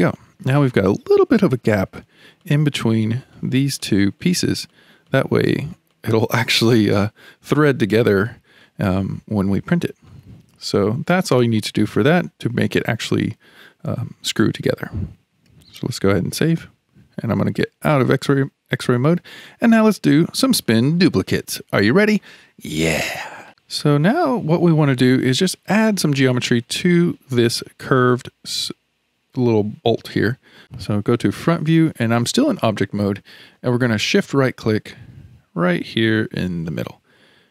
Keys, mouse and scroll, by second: 0.2-2.4 shift+middle drag, 2.4 click, 3.3 click, 3.8 click, 4.2 click, 4.7 click, 5.1 click, 5.5 click, 5.9 click, 6.4 click, 6.9-7.6 scroll down 3, 7.6-8.1 scroll down 1, 8.1-9.1 shift+middle drag, 9.1-9.5 scroll up 2, 9.5-10.2 middle drag, 10.2-10.6 scroll down 4, 10.6-15.6 shift+middle drag, 16.2 ctrl+s, 19.0 alt+z, 19.7-20.3 shift+middle drag, 20.3-20.6 scroll down 1, 20.6-23.5 shift+middle drag, 23.7-27.7 shift+middle drag, 30.7 ctrl+s, 31.4 KP_1, 33.1-36.1 shift+middle drag, 36.7 shift+right click.